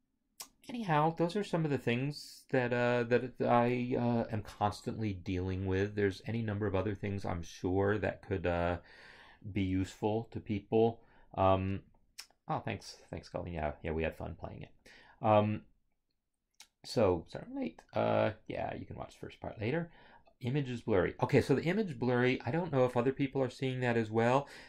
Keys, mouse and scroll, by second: 1.3 scroll, 1.9 scroll.